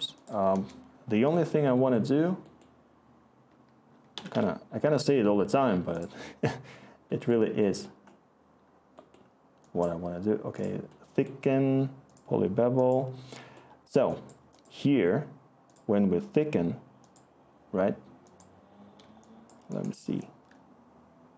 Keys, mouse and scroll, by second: 0.5 Return, 4.1 Escape, 4.3 Escape, 21.2-21.3 scroll.